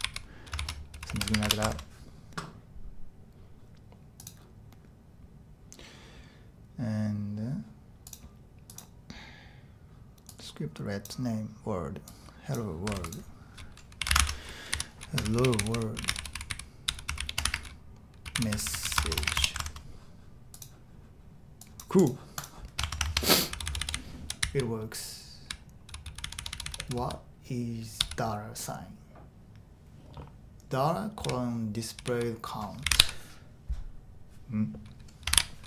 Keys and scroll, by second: 0.0-1.9 typing, 14.0-19.5 typing, 14.2 super+z, 22.8 shift+Tab, 23.0 shift+Tab, 23.2-28.0 typing, 30.8-33.5 typing, 35.3 shift+8.